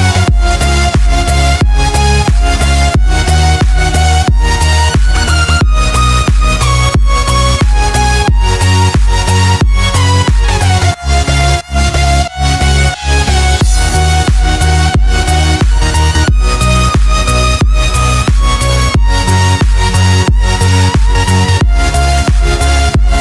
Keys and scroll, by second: 1.7 space, 2.8 space, 3.4 space, 4.7 z, 5.7 ctrl+0, 10.0 b, 11.0 ctrl+z, 12.0 x, 12.9 ctrl+z, 15.3 ctrl+j, 17.8 Return, 19.9 Delete, 21.7 e.